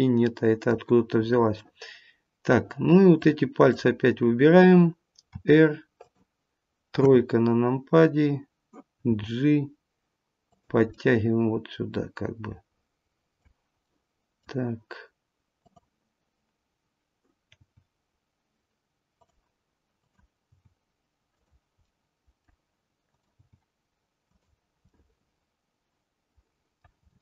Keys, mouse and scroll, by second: 1.5 middle click, 3.1 click, 5.3 r, 6.9 KP_3, 9.0 g, 10.9 middle click, 13.8 middle click, 15.5 click, 17.6 g, 19.9 click, 20.5 g, 21.7 middle click, 23.0 click, 23.5 g, 24.8 middle click, 26.9 middle click, 26.9 scroll up 2.